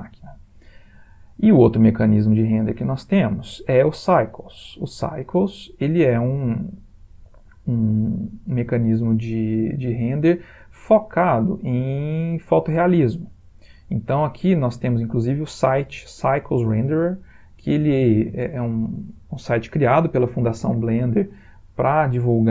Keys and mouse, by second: 3.6 click.